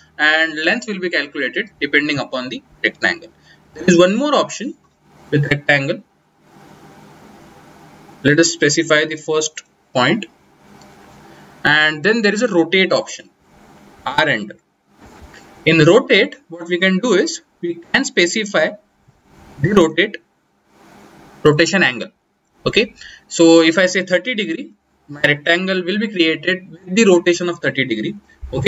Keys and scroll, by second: 3.1-4.7 typing, 13.3 r, 14.9 Return.